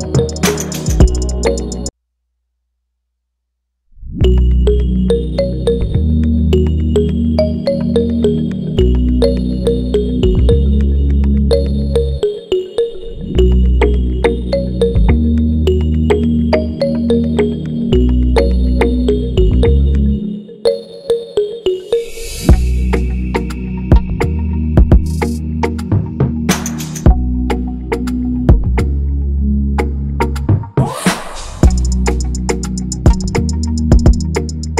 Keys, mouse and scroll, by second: 0.2 ctrl+-, 0.3 ctrl+-, 0.4 ctrl+-, 0.5 ctrl+-, 0.8 ctrl+=, 1.0 ctrl+=, 1.1 ctrl+=, 1.8 ctrl+=, 2.1 ctrl+-, 2.2 ctrl+-, 29.2 alt+click.